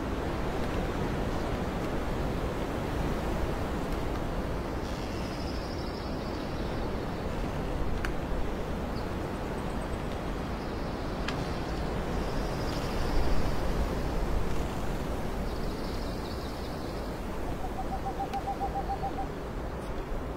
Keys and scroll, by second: 0.4 space, 1.4 alt+space, 1.9 ctrl+j, 2.6 space, 4.3 ctrl+alt+z, 4.7 space, 4.9 ctrl+alt+z, 6.0 ctrl+z, 14.6 ctrl+z, 16.0 alt+space, 17.0 ctrl+alt+j.